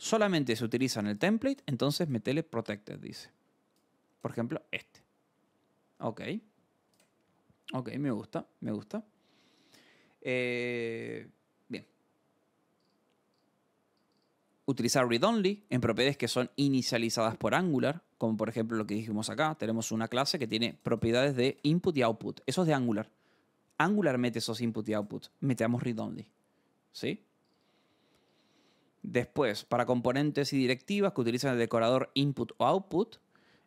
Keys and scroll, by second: 12.7 scroll, 22.4 Escape, 27.4 scroll.